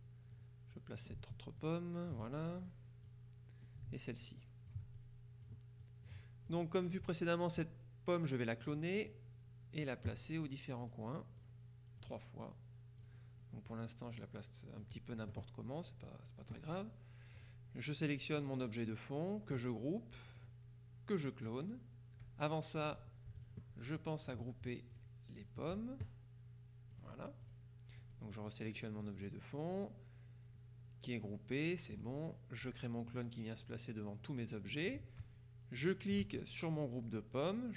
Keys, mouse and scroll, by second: 0.4 ctrl+click, 1.7-3.2 ctrl+drag, 4.3 ctrl+click, 5.9 click, 6.6 click, 8.7 click, 11.0 click, 13.1 click, 13.8-15.4 drag, 16.1 click, 17.4 click, 20.4 click, 23.0-24.9 drag, 25.0-26.0 drag, 27.0-28.1 drag, 32.7 click, 35.9 shift+click.